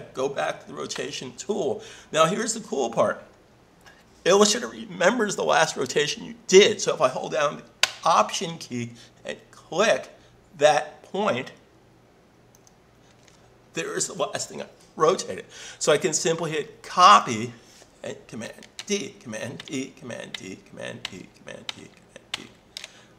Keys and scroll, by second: 18.8 super+d.